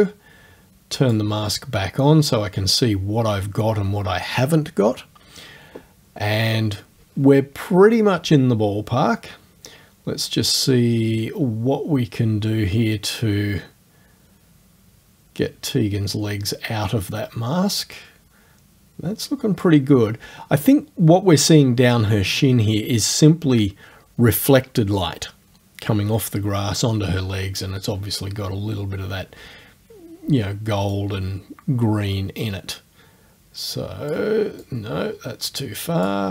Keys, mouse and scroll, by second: 1.0 click, 10.7-19.8 drag, 31.0-34.3 drag, 34.6 click.